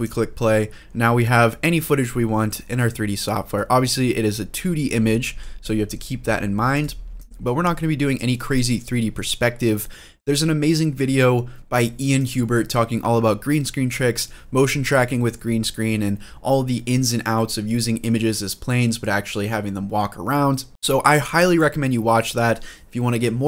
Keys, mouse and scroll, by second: 0.5 scroll down 1, 0.8-1.8 middle drag, 2.1 scroll up 2, 2.3 middle click, 2.8-3.3 scroll down 2, 3.3-5.2 middle drag, 5.3-5.8 scroll down 2, 5.8 scroll up 2, 6.5 click, 7.0-7.9 drag, 10.2-10.7 middle drag, 11.0-11.5 scroll down 2, 11.4 scroll up 2, 16.0-16.8 scroll up 2, 16.8 scroll down 1.